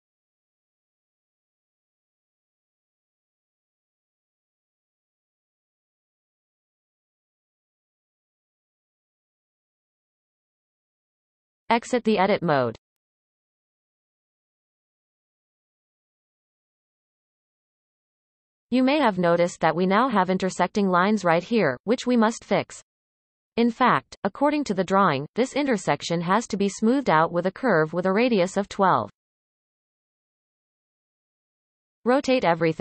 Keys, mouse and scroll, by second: 0.0-1.5 scroll up 7, 1.5-2.3 scroll up 1, 2.3 click, 3.5 x, 5.3 click, 5.7 shift+click, 6.6 f, 7.1 click, 7.6 shift+click, 8.4 f, 8.6-10.4 scroll down 14, 10.4-12.2 scroll up 2, 13.4 Tab, 14.2-17.3 shift+middle drag, 20.1-20.6 scroll up 4, 20.6-22.2 shift+middle drag, 22.2-23.2 scroll up 5, 24.7-27.8 scroll down 6, 27.8-30.9 shift+middle drag, 31.8-32.7 scroll up 2, 32.7-32.8 shift+middle drag.